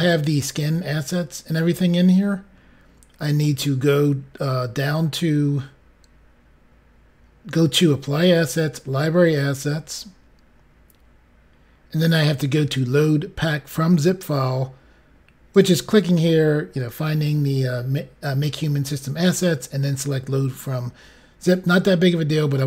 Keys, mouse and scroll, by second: 0.5-1.2 scroll down 1, 1.7-3.4 scroll up 5, 5.2-6.5 scroll down 5, 9.0-9.6 scroll down 5, 15.4 click, 21.3 click.